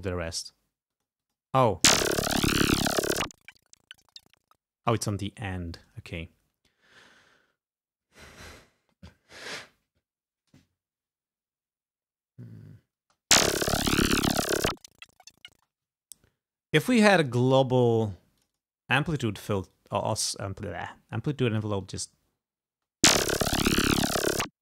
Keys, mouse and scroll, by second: 1.0 click, 1.6 space, 4.8 space, 5.4 ctrl+scroll up 2, 6.3 ctrl+scroll up 2, 13.1 space, 15.6 space, 16.0 ctrl+scroll down 2, 16.8 ctrl+click, 18.5 click, 19.9 click, 21.2 click, 22.0 space, 22.8 space.